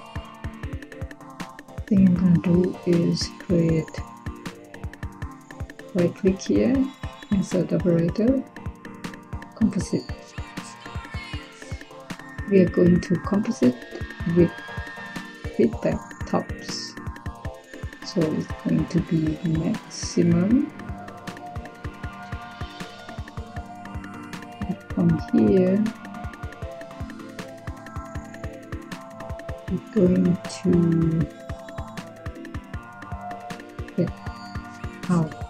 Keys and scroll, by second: 34.1 Tab, 35.1 f.